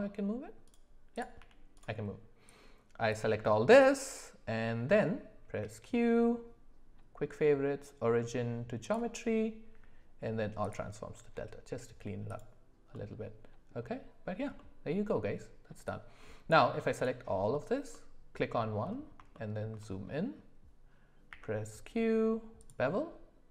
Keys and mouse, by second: 1.7 g, 2.4 click, 5.5 q, 9.7 q, 12.9 middle click, 14.5 middle click, 16.5 click, 16.9 shift+click, 17.9-18.3 middle drag, 19.3 shift+middle drag, 21.3 q.